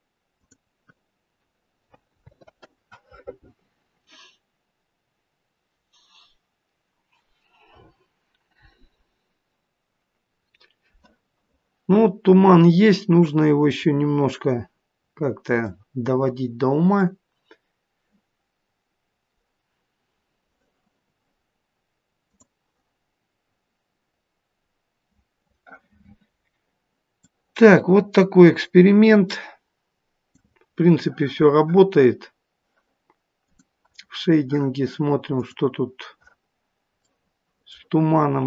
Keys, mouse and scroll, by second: 23.7 scroll up 2, 24.3 scroll down 1, 24.9 scroll down 1, 27.5 click.